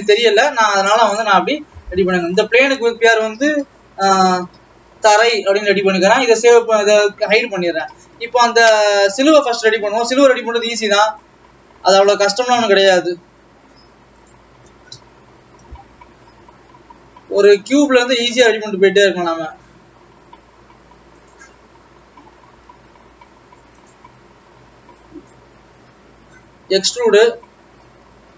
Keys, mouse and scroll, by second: 1.0 shift+a, 1.2 Escape, 1.5 Escape, 2.9-5.4 drag, 6.9 click, 7.4-8.5 scroll up 4, 9.0 shift+a, 10.5 shift+a, 13.7 s, 15.1 KP_1, 16.4-16.7 scroll up 8, 16.7 s, 18.8 Tab, 19.0 scroll up 6, 21.5 click, 23.0 s, 25.2 click, 26.2-27.0 scroll down 2, 27.0 e.